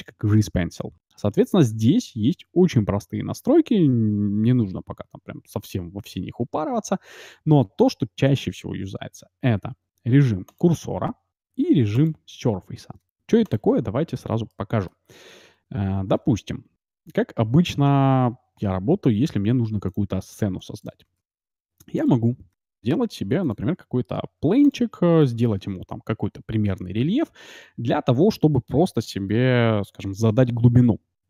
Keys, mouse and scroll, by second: 14.4-16.5 middle drag, 16.1 shift+s, 17.5 shift+a, 20.6 x, 21.2 shift+a, 22.5 s, 24.1 g, 24.9-27.0 middle drag.